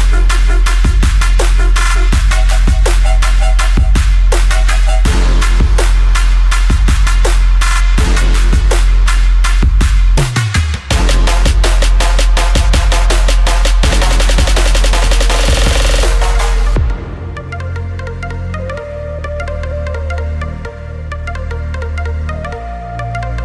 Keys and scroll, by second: 7.4 ctrl+g, 13.3 ctrl+shift+], 16.4 ctrl+shift+], 16.4 ctrl+z, 20.5 ctrl+c, 20.7 ctrl+f.